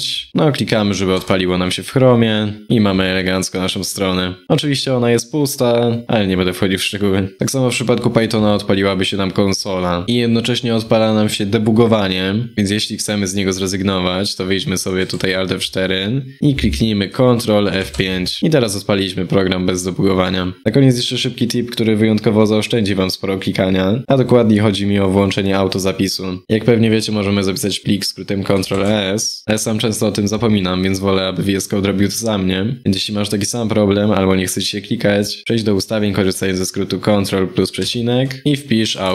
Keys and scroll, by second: 1.2 F5, 14.7 alt+F4, 17.5 ctrl+F5, 28.4 ctrl+s.